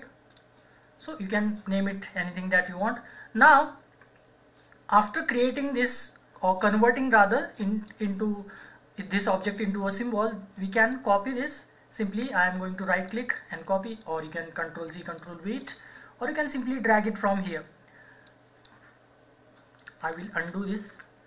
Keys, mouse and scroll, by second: 0.3 click, 7.5 click, 7.6-10.6 drag, 10.7 click, 12.8 right click, 13.5 click, 14.0 right click, 15.2 click, 15.2 click, 15.6 right click, 16.7-19.9 drag, 19.9 ctrl+z.